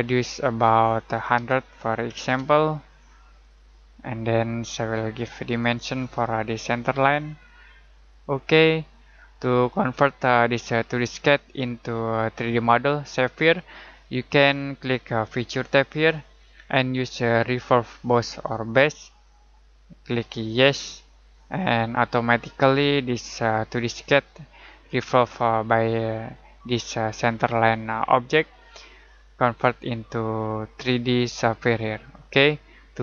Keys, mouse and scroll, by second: 1.4-2.3 typing, 3.4 click, 15.6 click, 18.7 click.